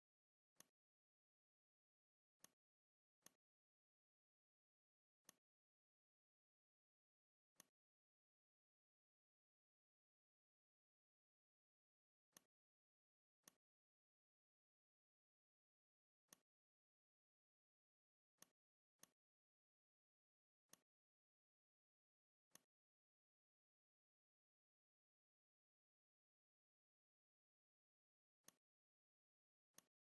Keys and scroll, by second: 4.6 space, 6.9 m, 11.7 v, 18.0 z, 18.8 space, 26.5 e.